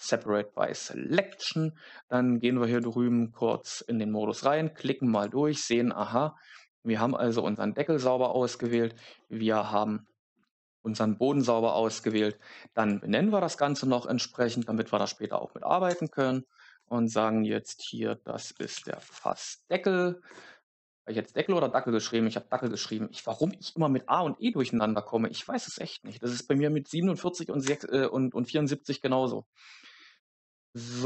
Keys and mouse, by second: 0.9 Tab, 5.0 click, 8.5 click, 12.0-20.2 drag, 15.9 shift+BackSpace, 16.1 shift+BackSpace, 22.7-27.6 drag.